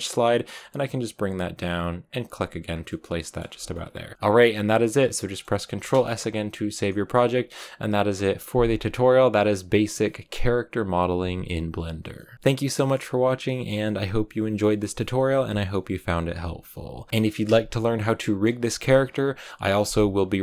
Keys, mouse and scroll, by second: 2.6 scroll down 4, 2.8 middle click, 3.4 Tab, 3.5 scroll down 1, 3.6-17.1 middle drag, 17.1 a, 17.8-19.7 middle drag.